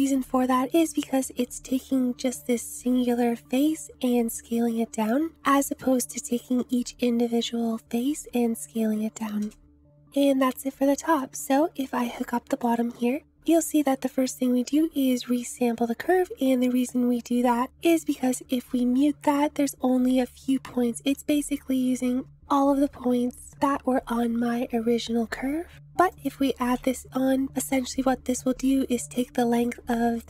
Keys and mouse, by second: 0.5 m, 4.8 m, 5.3 m, 8.8-9.5 middle drag, 9.5 click, 9.8-10.9 middle drag, 10.9 click, 11.1-12.1 middle drag, 12.1-13.6 drag, 17.8 click, 18.6 m, 20.5-21.2 drag, 22.1 Tab, 25.9 Tab, 26.1 click, 26.8 m.